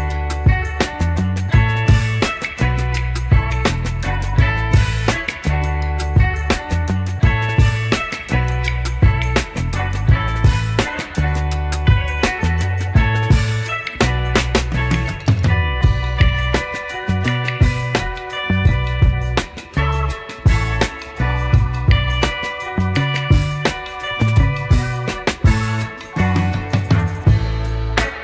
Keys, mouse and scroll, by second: 0.4 Delete, 2.0 shift+KP_1, 3.2 shift+a, 6.3-7.0 shift+middle drag, 7.6 g, 13.2 Tab, 13.7 middle click, 14.5 click, 15.1 3, 15.2 click, 16.1 KP_3, 19.7 g, 22.4 shift+middle click, 23.1-23.9 scroll up 2, 23.9 scroll down 1, 24.2 shift+middle click.